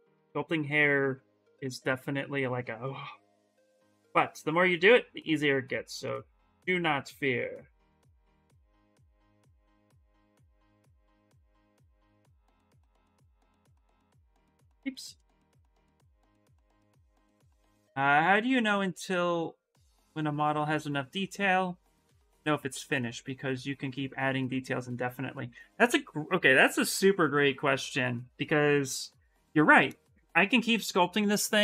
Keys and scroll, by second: 4.6 s, 11.5 s, 13.5 b, 15.5 s, 24.2 s.